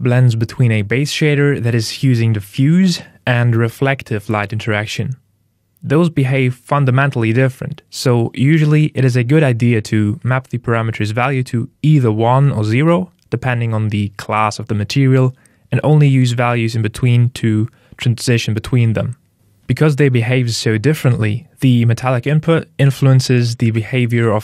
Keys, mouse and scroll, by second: 8.5 click.